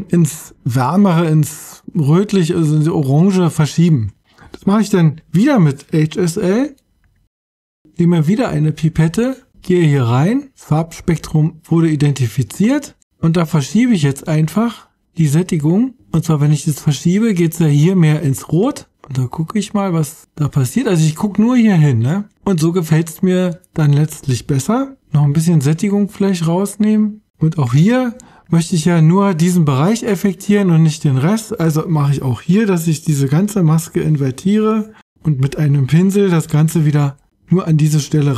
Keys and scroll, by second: 33.7 super+i.